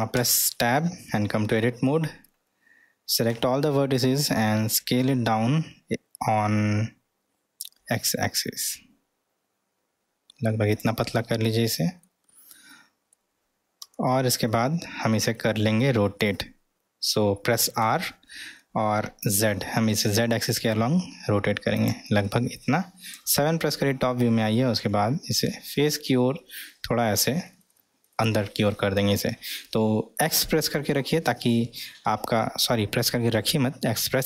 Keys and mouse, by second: 0.2 Tab, 0.8-1.5 middle drag, 3.3 a, 4.7 s, 11.2 middle click, 12.8 middle click, 13.8 Tab, 14.5-16.3 middle drag, 17.8 r, 22.3 middle click, 24.8 g.